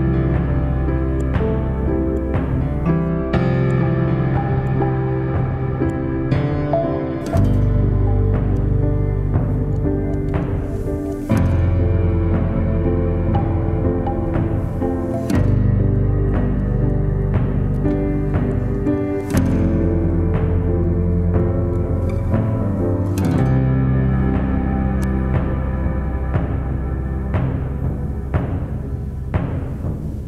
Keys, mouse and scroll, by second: 3.2 typing, 3.8 Return, 5.3-6.3 typing, 24.8 right click.